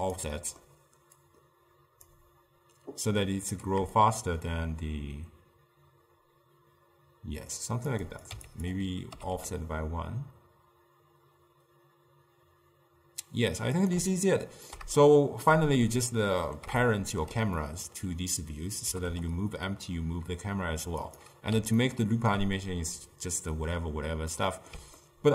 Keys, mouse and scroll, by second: 0.4-1.3 middle drag, 1.3-7.2 drag, 8.1 click, 9.4 g, 14.4-19.0 ctrl+middle drag, 19.0 g, 21.9-25.3 ctrl+middle drag.